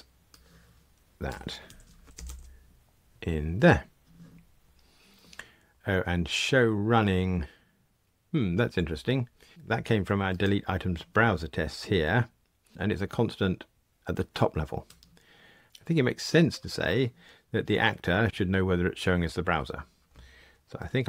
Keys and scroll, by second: 1.6 super+x, 2.2 super+v.